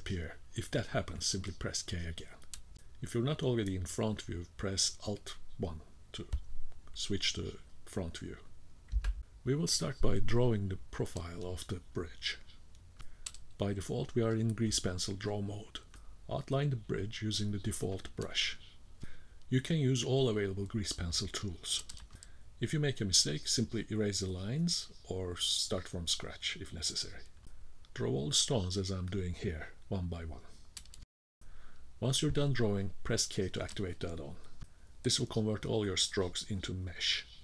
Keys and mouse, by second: 3.4 alt+KP_1, 7.4-11.4 drag, 13.3 BackSpace, 14.6 click, 15.5 click, 15.9 click, 16.3 click, 17.0 click, 18.0 ctrl+z, 18.3 click, 19.1 e, 19.2 click, 19.4 click, 19.6 d, 20.0 click, 20.9 click, 21.1 click, 21.2 click, 21.4 click, 21.6 click, 21.8 click, 21.9 click, 22.2 click, 22.4 click, 22.6 click, 22.8 click, 23.1 click, 23.8 click, 24.3 click, 24.6 click, 24.8 click, 25.0 click, 25.2 click, 25.4 click, 25.6 click, 25.7 click, 25.9 click, 26.0 click, 26.2 click, 26.4 click, 26.7 click, 26.8 click, 27.0 click, 27.1 click, 27.3 click, 27.4 shift+click, 27.6 click, 27.7 click, 28.0 click, 28.4 click, 28.8 shift+middle click, 28.9 click, 29.4 click, 29.5 click, 29.7 shift+middle click, 29.8 click, 30.0 click, 30.1 click, 30.4 click, 30.5 click, 30.7 click, 30.9 click, 31.2 click, 34.4-35.6 shift+drag, 37.3 k.